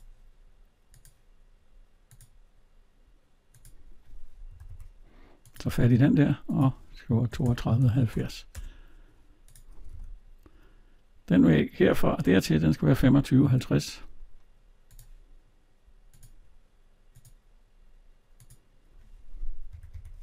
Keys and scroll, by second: 4.3 Escape, 8.3 Return, 9.8 alt+Tab, 19.5 Escape.